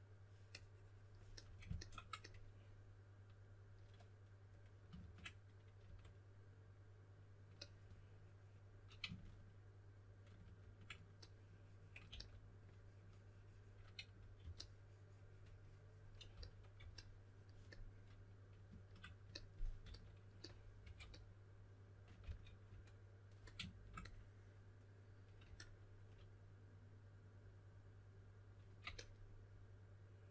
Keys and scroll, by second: 4.9 shift+5, 5.8 5, 10.4 shift+5, 12.0 typing, 14.3 typing, 16.3-16.7 typing, 19.8-20.8 typing, 22.2 typing.